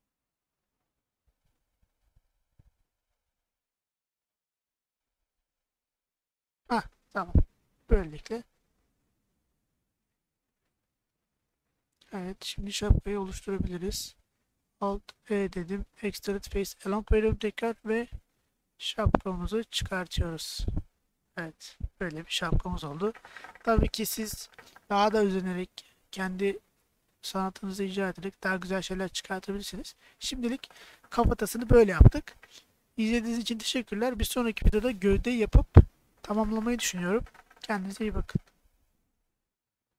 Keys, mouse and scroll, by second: 2.2 click, 3.0 click, 6.1 alt+click, 6.8 middle click, 7.8 middle click, 8.5-10.3 middle drag, 10.9 middle click, 11.7 middle click, 15.1 alt+e, 20.8 click, 21.2-24.6 middle drag, 25.2 middle click, 25.9 shift+middle click, 27.7-29.3 middle drag, 30.4 middle click, 31.6 middle click.